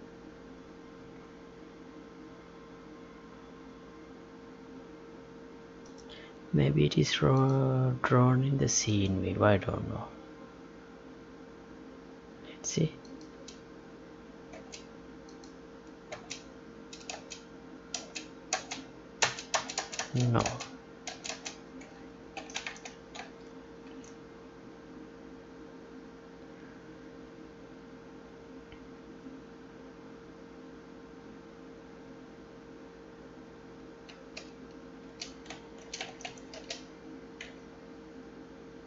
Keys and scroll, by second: 14.4 space, 16.1 space, 22.3 ctrl+p, 22.8 Tab, 23.3 alt+Tab.